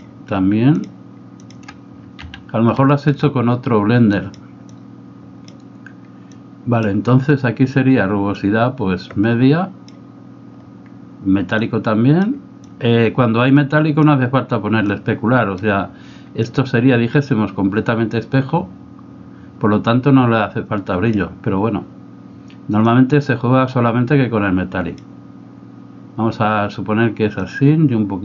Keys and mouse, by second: 0.8 shift+click, 1.4 shift+click, 2.4 x, 2.9 shift+middle click, 4.1 click, 4.8 click, 6.4 click, 8.4-10.0 drag, 11.7 click, 12.7-14.2 drag, 14.8 click, 16.5-21.1 drag, 23.0-25.1 drag, 27.4-28.2 drag.